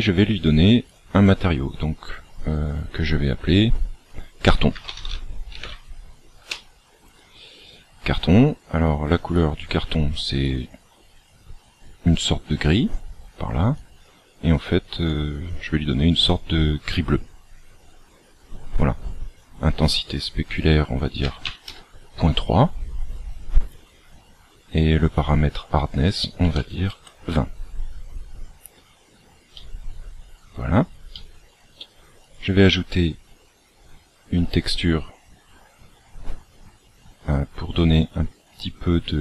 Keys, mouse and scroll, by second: 0.9 click, 8.0-8.3 scroll down 1, 9.3 click, 9.3-10.5 scroll down 2, 19.8 click, 25.2 click, 29.5 middle click, 31.1 middle click, 32.2 click.